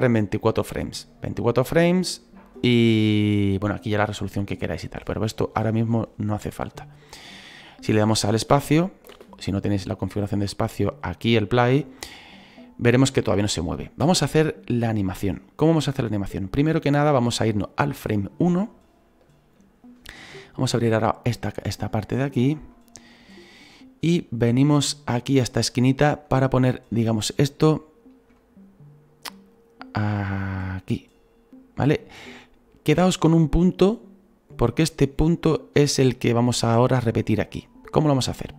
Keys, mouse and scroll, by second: 8.5 space, 9.1 space, 9.5-11.8 drag, 14.0 space, 15.0-22.7 drag, 22.7-24.0 shift+middle drag, 24.0-24.9 scroll up 4, 24.9 shift+middle click, 25.6-26.3 scroll up 2, 26.3-26.7 scroll up 1, 26.7-29.5 shift+middle drag, 29.5-38.5 drag.